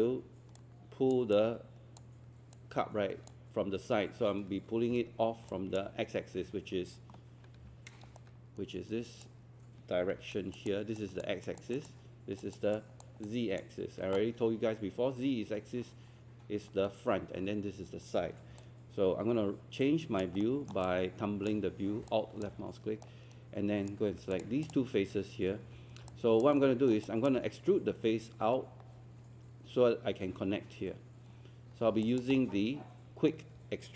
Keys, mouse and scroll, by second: 4.5 Escape, 7.6 q, 8.2-9.8 shift+right drag, 10.6-13.2 drag, 13.8 Escape, 18.6-20.2 alt+drag, 20.4 alt+middle click, 20.8 alt+click, 22.1 alt+click, 23.0 right click, 24.4 shift+click, 26.1 alt+click, 26.8 alt+middle click, 27.1 alt+click, 31.7 scroll up 1, 32.0 alt+click, 32.4 alt+middle click.